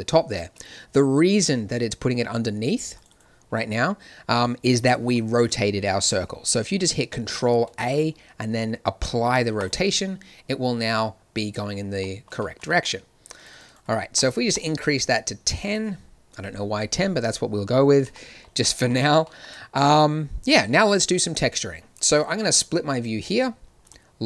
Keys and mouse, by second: 4.9 click, 7.6 ctrl+a, 13.3-16.8 drag, 16.8-18.1 middle drag, 18.1 drag, 18.2-22.2 middle drag, 22.2-24.2 drag.